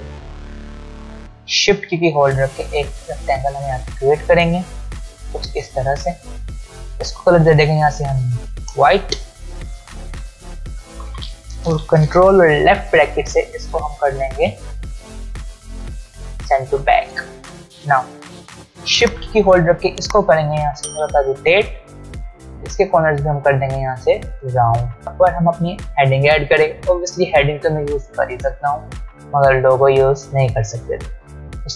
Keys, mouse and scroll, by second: 2.1-4.9 shift+click, 10.8 click, 19.0-21.8 drag, 23.4-24.6 drag, 25.0 alt+scroll up 1.